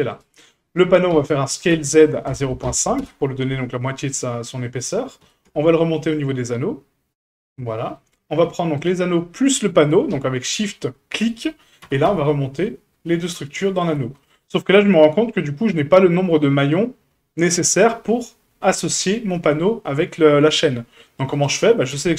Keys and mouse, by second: 0.1 right click, 1.1 s, 4.1-4.6 middle drag, 5.2 g, 7.5-8.0 middle drag, 8.8 shift+click, 11.8 g, 14.1-14.6 middle drag, 15.2 shift+middle drag, 15.9 middle drag, 16.7-17.4 middle drag, 21.3 right click, 21.9 Tab.